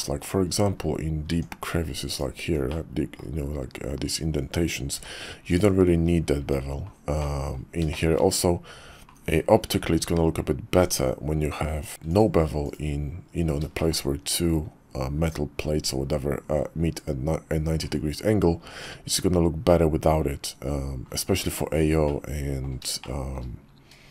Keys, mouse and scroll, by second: 0.8 middle click, 1.3 Tab, 2.1 alt+click, 2.7 click, 4.9 x, 5.8 middle click, 6.4 Tab, 7.2 middle click, 7.9 shift+middle click, 8.6 KP_5, 10.7 Tab, 11.8 click, 12.1-13.1 drag, 13.8 shift+click, 18.7 Tab, 22.0-22.6 middle drag, 23.0-23.4 shift+middle drag.